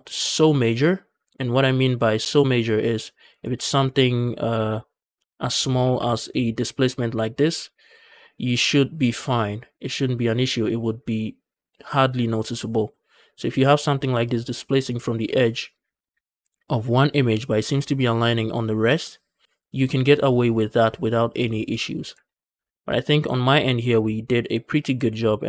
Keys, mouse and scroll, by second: 2.4-3.0 drag, 3.1 Tab, 3.4 shift+middle click, 3.6-4.4 scroll up 1, 4.4 KP_0, 5.0 scroll up 2, 5.3 shift+middle click, 5.7 g, 5.8 g, 7.3 shift+click, 22.1 ctrl+z, 22.4 Tab, 22.4 scroll down 1, 22.6 shift+middle click, 22.9 scroll down 2, 23.2 Tab, 23.8 Tab, 24.1-24.8 scroll up 2, 24.9-25.4 shift+middle drag.